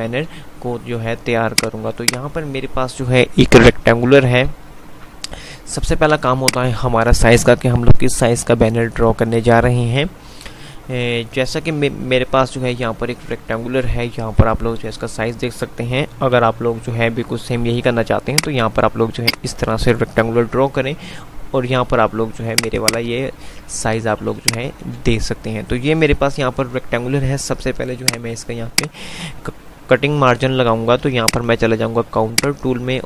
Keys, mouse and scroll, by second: 1.5 click, 4.9 F2, 6.5-7.2 drag, 18.2 click, 20.4 F5, 27.0 F5, 28.4 click, 31.5-33.0 drag.